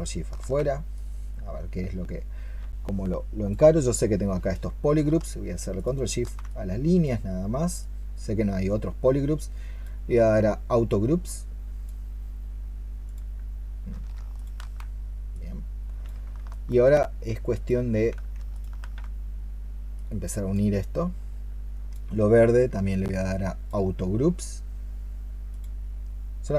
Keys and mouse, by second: 5.6 ctrl+shift+click, 13.8 ctrl+shift+click, 14.2 ctrl+shift+click, 16.4 alt+click, 18.4 ctrl+shift+click.